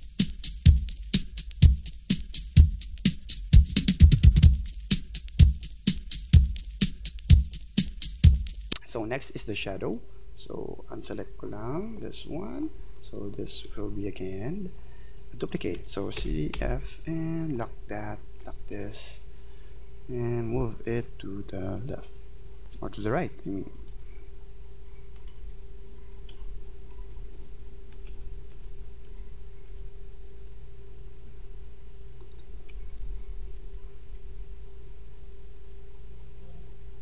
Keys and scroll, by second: 13.6 ctrl+z, 16.2 ctrl+c, 16.5 ctrl+f, 23.9 alt+Right, 25.2 Right, 26.3 ctrl+z, 27.1 Right, 28.1 ctrl+z, 32.9 Right, 34.0 Left.